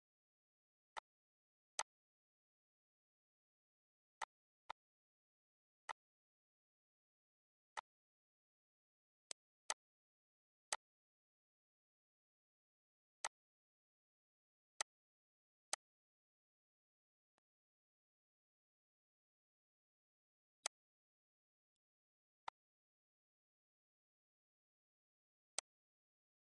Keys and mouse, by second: 0.9 click, 1.7 click, 4.1 click, 5.8 click, 7.7 click, 9.2 click, 10.7 click, 13.2 click, 14.7 click, 15.6 click, 17.3 click, 20.6 click, 21.6 click, 22.3 click, 25.5 click.